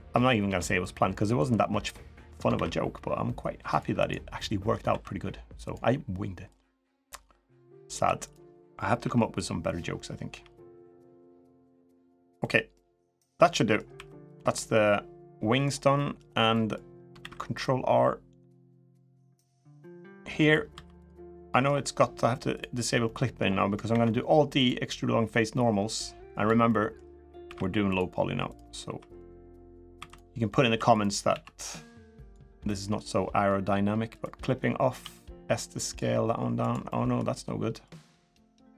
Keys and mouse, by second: 0.2 g, 2.3 ctrl+r, 4.1 middle click, 4.6 2, 5.4 click, 6.3 click, 7.8 2, 8.0 click, 8.7 KP_1, 10.1 g, 12.2 click, 12.3 middle click, 13.2 middle click, 13.7 3, 14.0 click, 14.3-15.4 middle drag, 15.7 middle click, 16.3 middle click, 16.9 ctrl+r, 20.5 3, 21.0 middle click, 22.3 click, 22.8 middle click, 23.6 alt+e, 26.4 middle click, 27.2 ctrl+r, 28.6 3, 28.9 middle click, 29.7 3, 29.8 click, 30.7 click, 30.7 3, 31.1 s, 32.3 middle click, 33.9 click, 34.7 s, 36.6 middle click, 37.1 middle click, 37.8 middle click, 38.4 middle click.